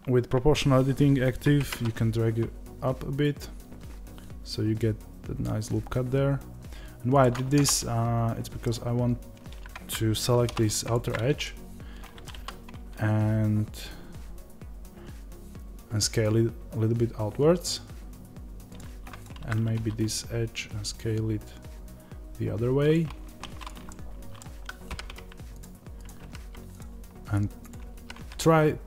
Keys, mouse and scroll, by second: 10.3 2, 10.7 alt+click, 11.3-19.1 middle drag, 12.2 s, 19.1 alt+click, 19.6 s, 23.2 1, 23.5 click, 23.8-28.8 middle drag, 24.8 g.